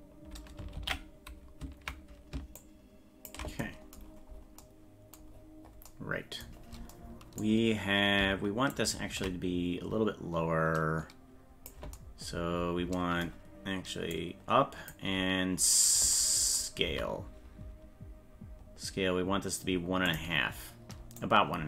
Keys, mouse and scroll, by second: 0.8 ctrl+l, 2.6 ctrl+click, 4.1-4.5 scroll down 7, 5.4-5.9 scroll up 7, 6.6 scroll up 2, 8.7 ctrl+click, 14.1 click, 16.9 s, 21.2 click.